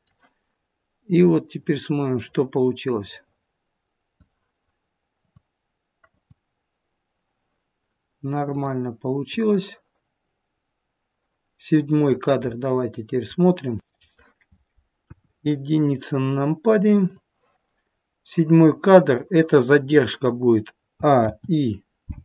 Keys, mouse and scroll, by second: 1.1 click, 5.2 click, 6.0 click, 9.3 click, 14.9 KP_1, 17.0 click, 20.9 a, 21.1 i.